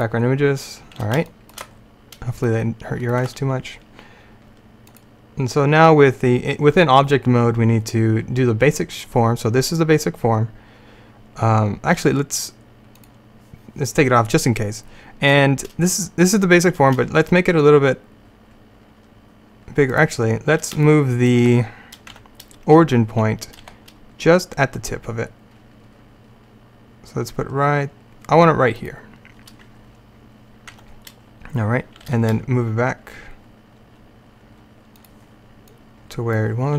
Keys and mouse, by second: 0.0-1.8 drag, 2.6 middle click, 5.0-6.9 drag, 13.0-15.3 drag, 17.0 s, 22.2 Tab, 23.7 g, 30.8 Tab, 32.1 g, 35.8-36.7 drag.